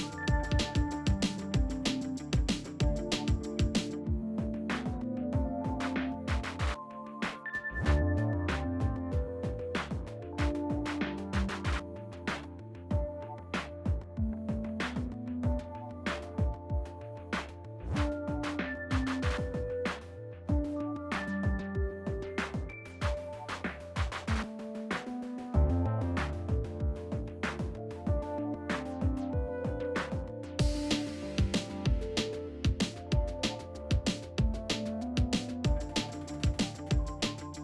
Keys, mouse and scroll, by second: 0.5 Caps_Lock, 0.6-4.1 typing, 6.4 click, 10.8 click, 15.5 typing, 17.5 click, 17.5 typing, 17.5-19.7 drag, 20.5-24.7 typing, 26.7 typing, 28.3 typing, 31.5 click, 33.0 scroll down 1, 35.0 click.